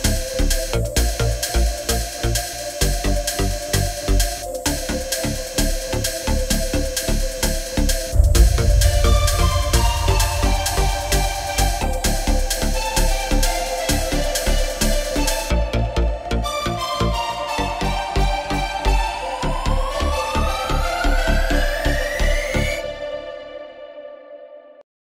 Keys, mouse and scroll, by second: 0.4 shift+KP_7, 0.5 e, 0.9 click, 1.5-3.9 typing, 2.6 click, 3.4 shift+click, 3.6 shift+click, 4.0 Tab, 4.5 Tab, 5.1 Tab, 5.5 g, 5.6 Tab, 6.6 Tab, 7.1 shift+click, 7.7 Tab, 8.1 super+z, 8.3 Tab, 9.4 Tab, 10.1 click, 10.8 z, 11.5 s, 11.6 g, 11.8 Tab, 12.6 Tab, 12.7 super+z, 12.8 Tab, 13.6 s, 13.8 super+z, 15.5 s, 15.6 g, 15.8 Tab, 15.9 Tab, 16.3 super+z, 16.4 g, 16.5 super+z, 16.6 Tab, 17.0 Tab, 17.1 Tab, 17.6 super+z, 18.3 shift+Tab, 20.4 Tab, 23.1 Tab, 24.9-25.0 typing.